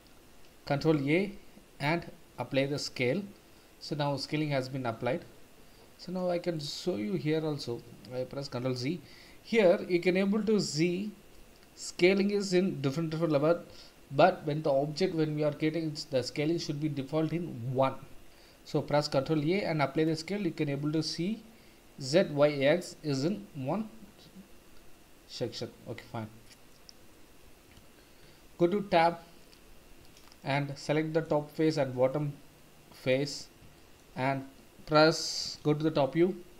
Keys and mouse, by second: 0.7 ctrl+a, 3.6-4.2 middle drag, 4.9 n, 6.5 click, 8.4 ctrl+z, 19.1 ctrl+a, 26.1-26.6 middle drag, 27.1-27.6 middle drag, 28.4 Tab, 29.7 3, 30.7 middle click, 31.6 shift+click, 32.1-33.1 middle drag, 33.7 shift+middle click, 35.8 KP_7.